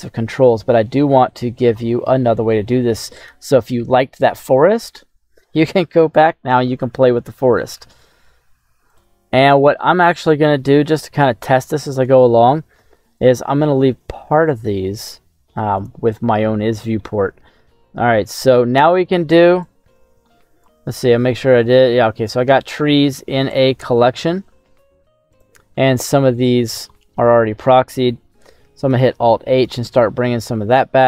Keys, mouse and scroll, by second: 0.4-2.2 scroll down 1, 2.2 middle click, 8.9 ctrl+c, 9.3-9.7 scroll down 2, 9.7 middle click, 10.7 shift+middle click, 11.2 middle click, 12.1 shift+middle click, 12.9 scroll up 1, 15.7 right click, 16.7 middle click, 17.8-18.3 scroll down 2, 18.3 middle click, 19.6 click, 22.2 click, 23.4 click, 26.0 middle click, 26.8 shift+middle click, 27.6 shift+middle click, 28.9 alt+h, 29.5 right click, 30.1-30.6 scroll up 2.